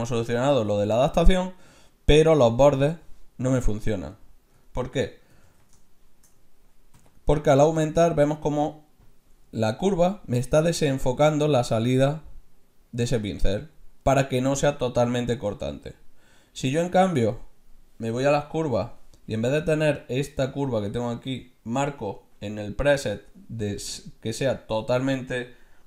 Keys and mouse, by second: 5.7 ctrl+z, 6.9 f, 17.3-20.4 middle drag, 21.9-23.7 drag.